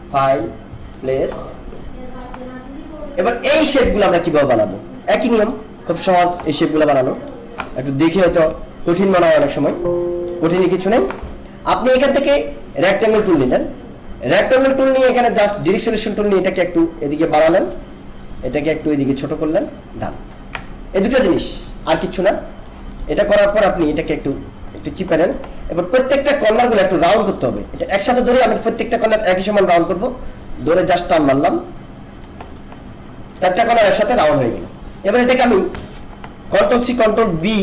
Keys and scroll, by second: 8.2 ctrl+=, 9.5 alt+space, 37.2 ctrl+c.